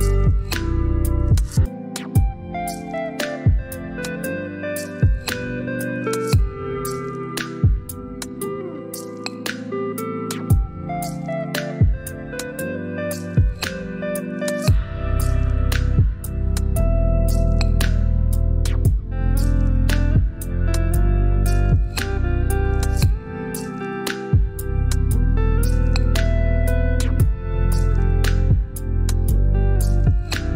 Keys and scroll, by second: 29.8-30.5 typing.